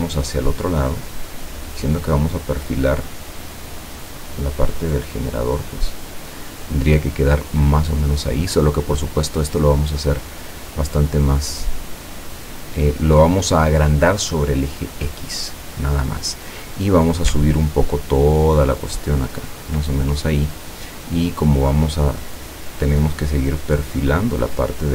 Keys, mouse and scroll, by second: 8.3-13.5 drag, 17.6-19.9 ctrl+drag, 21.6 click, 23.4-24.8 drag.